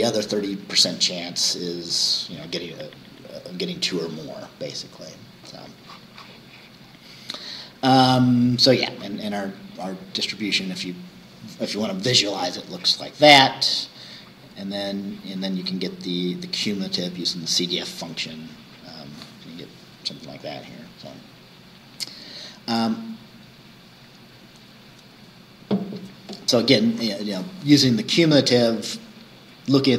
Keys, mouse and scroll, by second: 6.4-7.2 scroll down 4, 8.1 scroll down 2, 9.3 scroll down 2, 13.4-14.1 scroll down 4, 14.6-15.0 scroll up 2, 17.9-18.3 scroll down 2, 21.9-22.2 scroll down 2.